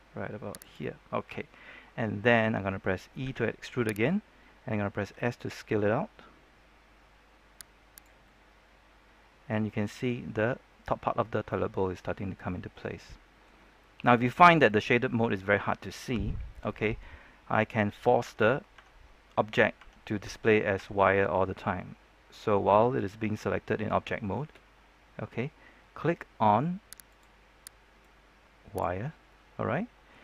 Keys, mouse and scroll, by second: 0.5 click, 1.0-1.7 scroll down 1, 1.7-3.2 scroll up 1, 3.2 e, 3.8 right click, 4.9 s, 7.9 click, 8.2-13.5 middle drag, 13.5 scroll down 1, 13.7 middle click, 14.0-14.3 scroll up 1, 14.6-15.1 scroll down 1, 15.4-16.6 middle drag, 18.2 Tab, 27.0 click, 29.2-30.2 middle drag.